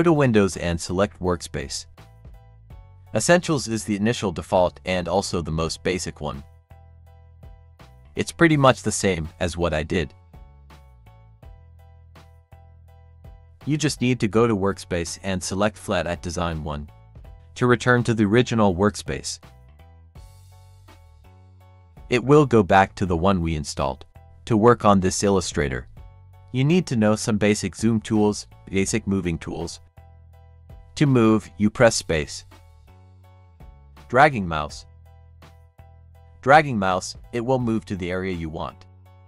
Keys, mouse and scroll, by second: 5.0 click, 13.7 click, 20.7 click, 32.9 space, 36.5 click, 36.6 space, 38.1 click, 38.4 space, 38.9 click, 39.0 space.